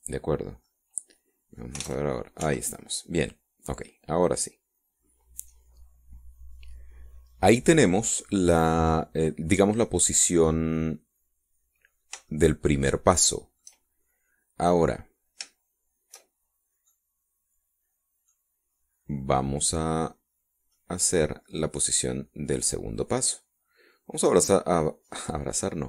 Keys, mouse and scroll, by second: 0.0 y, 0.9 click, 1.3 scroll down 2, 1.7-2.8 middle drag, 2.9 alt+a, 3.5 Escape, 5.3 click, 5.7-12.7 middle drag, 12.7-13.3 scroll up 1, 13.3-14.8 shift+right drag, 17.4 shift+scroll down 1, 17.9-19.5 middle drag, 21.8-23.0 drag.